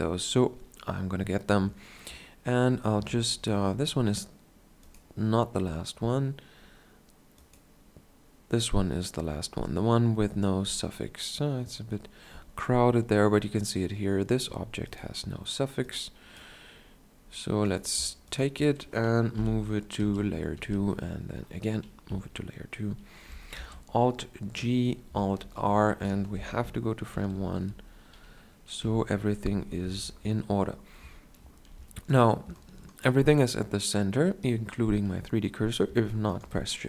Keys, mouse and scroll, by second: 19.5 m, 20.8 2, 22.2 KP_7, 23.7 alt+g, 25.6 alt+r, 26.5 shift+Left, 27.5 alt+r, 29.0 KP_1, 32.3 shift+scroll down 1, 35.9 shift+scroll down 1, 36.4 shift+scroll down 1.